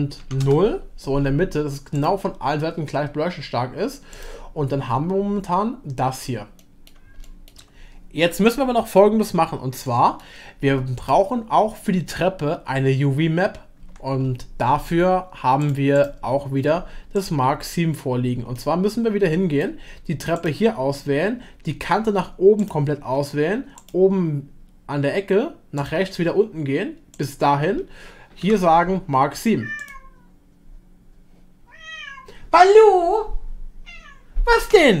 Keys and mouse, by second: 2.0 click, 6.6 middle click, 7.2 shift+middle drag, 9.8 middle click, 13.8 Tab, 17.7 middle click, 18.6-19.6 middle drag, 23.8-27.2 ctrl+drag, 28.4 u.